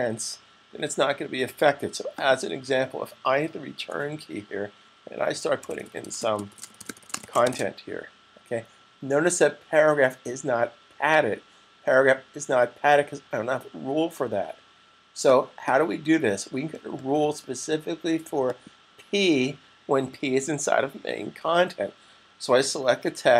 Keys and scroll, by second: 4.9-7.9 typing.